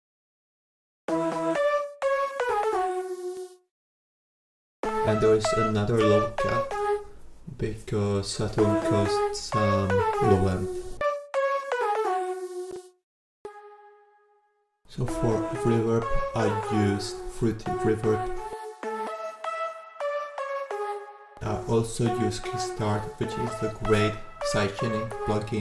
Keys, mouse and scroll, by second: 0.9 click, 8.1-8.9 scroll up 2, 8.9-9.8 scroll up 1, 9.8 click, 10.0 click, 23.0 click, 24.3-25.6 drag.